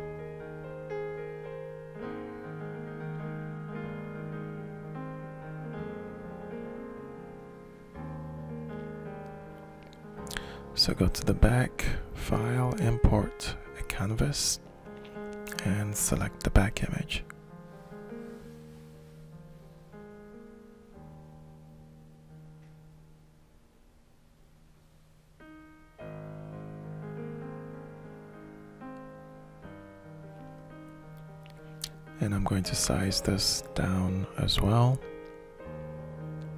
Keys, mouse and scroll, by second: 0.1-1.3 alt+shift+middle drag, 2.8 alt+shift+click, 3.9 ctrl+shift+click, 4.2 ctrl+shift+click, 9.5 click, 11.1 click, 12.1 click, 13.1 click, 16.1 click, 16.2 click, 17.5 middle click, 17.9 middle click, 18.1 middle click, 18.5 middle click, 20.2-21.4 shift+drag, 21.7-22.9 shift+middle drag, 24.2 click, 25.1 click, 26.4 click, 27.1 click, 27.8 shift+click, 28.1 ctrl+shift+click, 29.4 click, 30.9-32.3 shift+drag, 32.6 shift+middle click, 34.0 click, 35.2 click, 36.1 click.